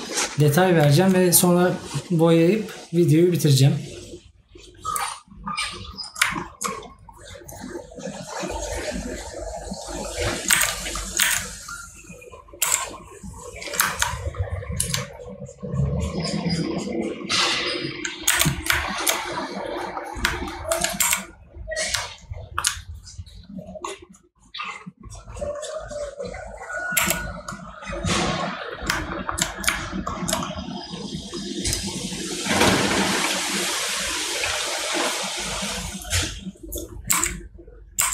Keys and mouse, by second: 20.5 right click, 22.4 right click, 29.1 right click.